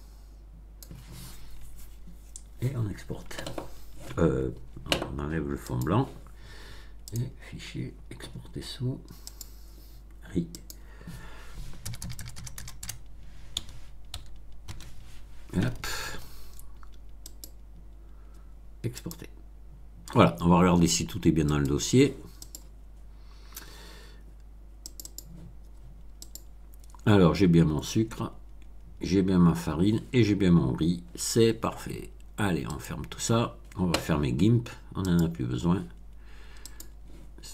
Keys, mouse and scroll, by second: 5.6 click, 7.0 click, 9.2 click, 10.5 click, 11.8 BackSpace, 13.5 r, 14.1 i, 14.6 z, 17.2 click, 18.9 click, 21.4 click, 22.4 click, 24.8 click, 26.2 click, 32.6 click, 35.0 click, 36.6 click.